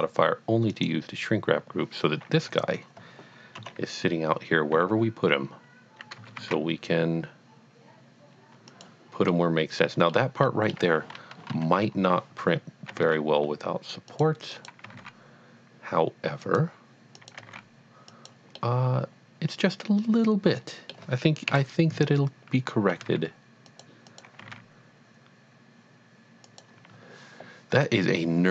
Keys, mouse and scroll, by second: 0.7 click, 2.5 click, 3.6 KP_7, 4.7 g, 6.5 z, 8.7 click, 9.3 middle click, 9.7 middle click, 10.4 middle click, 11.5 KP_1, 12.9 g, 13.0 z, 14.2 click, 14.6 click, 14.9 g, 15.0 z, 16.5 click, 17.2 click, 17.4 g, 17.7 z, 18.2 click, 18.5 middle click, 19.0 middle click, 21.5 KP_1, 22.9 g, 23.0 z, 23.6 click, 24.1 click, 24.4 g, 24.5 z, 26.5 click.